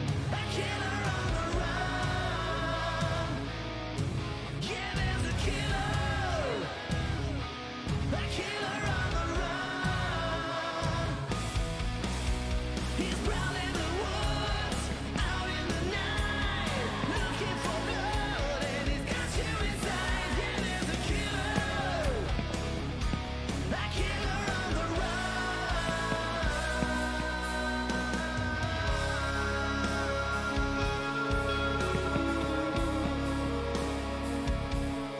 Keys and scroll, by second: 0.0-0.2 typing, 0.5 Return, 3.1-4.8 typing, 14.5-15.8 typing, 21.2 d, 21.8 w, 25.2-26.9 typing, 31.3-32.2 typing.